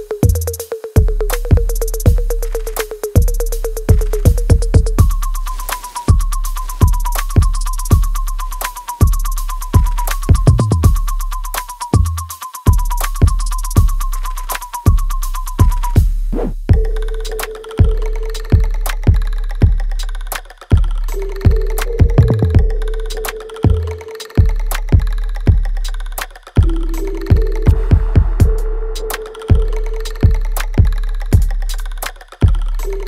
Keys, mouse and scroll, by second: 0.0 click, 1.5 ctrl+click, 2.6 ctrl+z, 3.0-13.0 ctrl+drag, 15.5 alt+click, 16.2 alt+middle click, 17.4-19.0 alt+drag, 19.0 alt+middle click, 20.3-21.8 drag, 21.8-23.3 ctrl+drag, 23.3 click, 25.1 alt+right click, 25.8-27.8 alt+drag, 27.8 right click, 28.8 alt+click, 29.7 alt+middle click, 30.1 click, 30.4 alt+right click, 31.0 alt+click, 32.0 alt+right click, 32.7 alt+click.